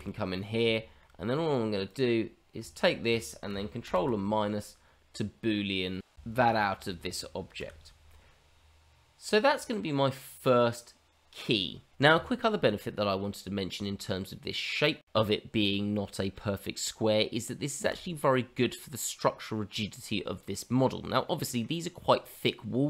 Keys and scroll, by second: 7.7 h.